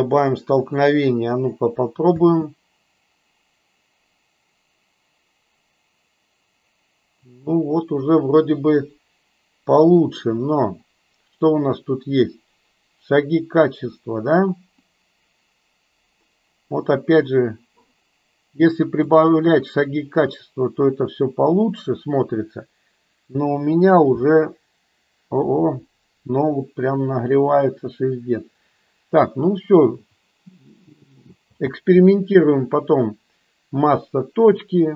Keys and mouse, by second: 2.1 space, 15.2-17.6 drag, 19.2 click, 31.7 space.